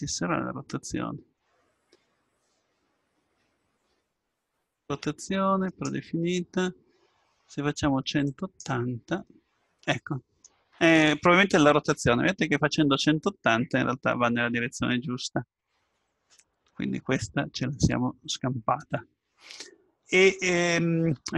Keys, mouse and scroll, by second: 2.2-2.5 scroll down 1, 5.7-7.6 drag, 9.3-11.2 middle drag, 16.4-18.5 middle drag.